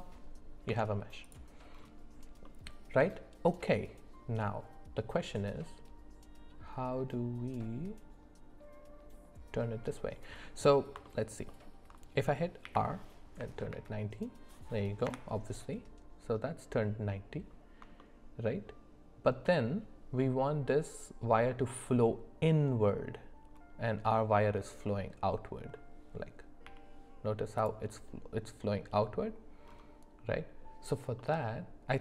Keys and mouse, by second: 0.7 Tab, 2.4-5.5 middle drag, 11.0 alt+middle click, 11.5 alt+middle click, 12.6 r, 18.0 shift+middle click, 26.7 g, 31.2-32.0 middle drag.